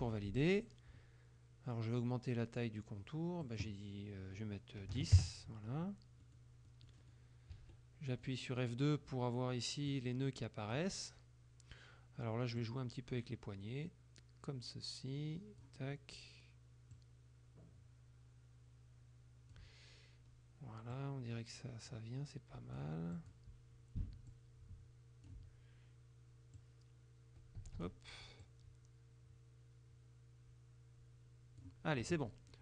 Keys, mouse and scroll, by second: 0.0 Return, 3.5 click, 5.0 KP_1, 5.2 KP_Enter, 6.3 middle click, 6.7 middle click, 7.6 F2, 8.2 middle click, 10.0 click, 12.7-15.9 drag, 17.0-19.8 drag, 21.0-23.0 drag, 23.2 click, 24.4-25.5 drag, 26.7-28.1 drag, 27.7 Escape, 28.5-31.8 drag, 32.1 F1, 32.3 middle click.